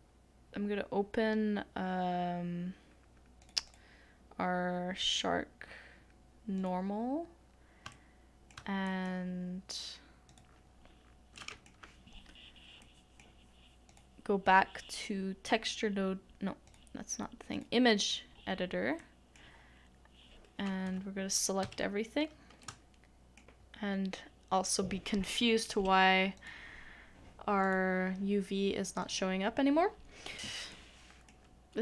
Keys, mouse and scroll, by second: 3.7 double click, 12.5-16.4 scroll up 1, 20.5 middle click, 22.3 a, 30.7 middle click.